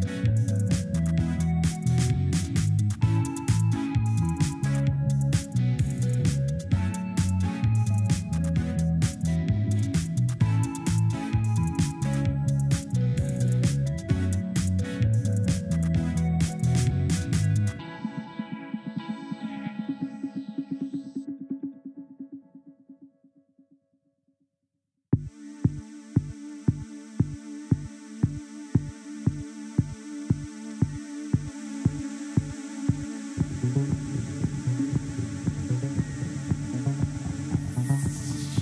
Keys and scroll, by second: 17.2 1, 17.8 Return.